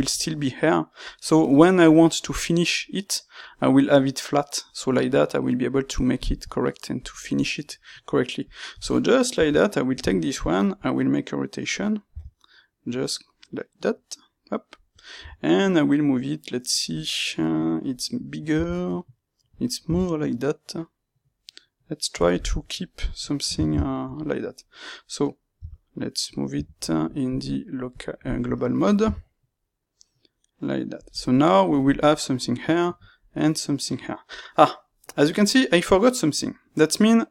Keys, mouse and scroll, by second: 7.0 click, 7.6 middle click, 8.4 click, 9.3 KP_3, 10.0-14.9 shift+middle drag, 12.0 r, 14.9 click, 15.1 g, 16.9 click, 18.5 r, 19.5 click, 19.8 g, 22.2 click, 23.6-27.2 ctrl+shift+middle drag, 25.5 g, 26.5 Escape, 27.2-31.0 drag, 29.0 g, 35.2-37.3 middle drag.